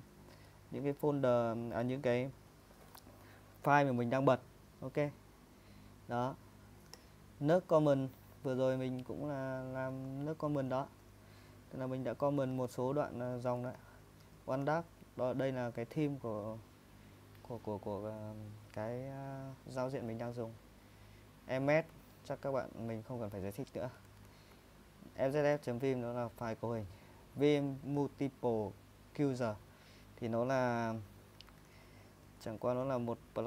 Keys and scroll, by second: 0.4 typing, 12.3 ctrl+w, 12.5 ctrl+w, 13.4-14.6 typing, 15.8-16.2 typing, 20.2 j, 21.1 k, 21.9 j, 23.7-25.4 typing, 30.5-31.4 typing, 32.7 ctrl+w, 32.9 ctrl+w.